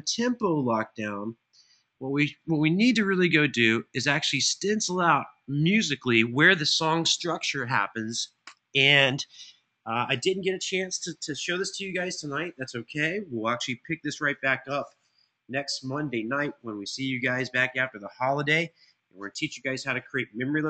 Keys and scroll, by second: 20.5 super+[.